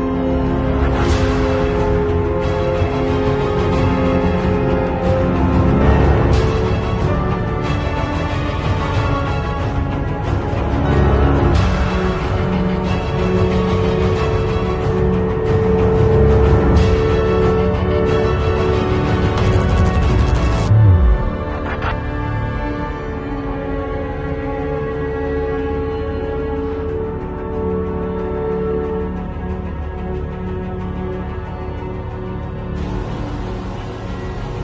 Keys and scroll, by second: 11.0 Delete, 14.4 super+i, 15.0 ], 16.0 x, 22.3 x, 25.4 x, 25.9 [, 27.7 [.